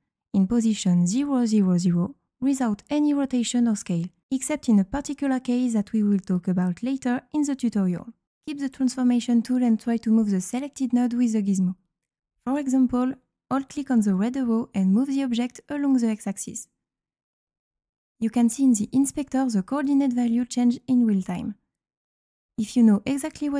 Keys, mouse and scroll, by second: 1.2 click, 15.9-19.0 drag.